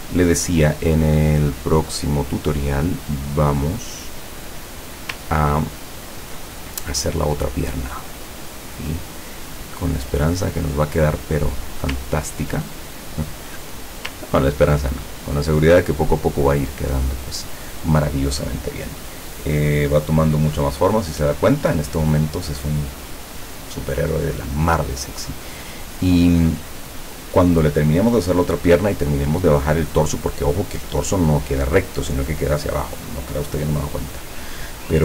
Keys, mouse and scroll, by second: 0.5-2.2 drag, 2.6-4.4 drag, 5.5-6.0 ctrl+scroll down 2, 6.7-7.5 ctrl+scroll up 5, 7.9 click, 9.7 click, 11.6 scroll up 1, 12.1-12.6 ctrl+scroll down 1, 13.0 ctrl+click, 13.8 scroll up 1, 14.6 ctrl+scroll up 1, 15.3-15.8 ctrl+scroll down 2.